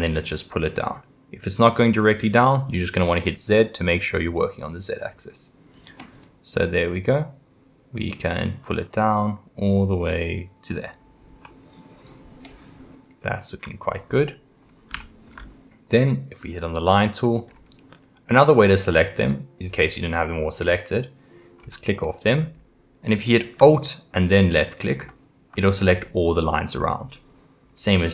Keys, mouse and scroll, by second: 11.5-14.1 middle drag, 14.1 scroll, 14.3-14.7 scroll, 15.0-16.8 shift+middle drag, 16.8 click, 17.5 scroll up 2, 20.5 click, 21.6-22.0 scroll down 1, 22.0 middle click, 22.5-23.5 scroll up 2, 24.9 alt+click, 25.7-26.7 middle drag, 26.7-27.1 scroll down 3, 27.1-28.1 middle drag.